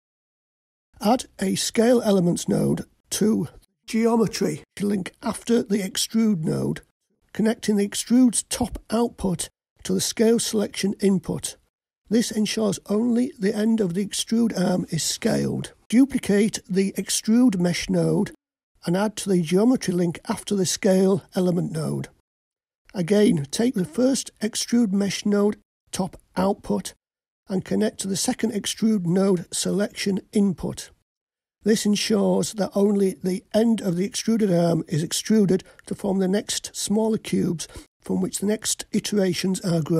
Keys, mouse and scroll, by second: 0.9 click, 2.6-5.6 drag, 5.8-10.5 drag, 12.6-14.0 drag, 17.8 click, 19.6 shift+d, 22.2 click, 24.8 click, 26.5-27.9 drag.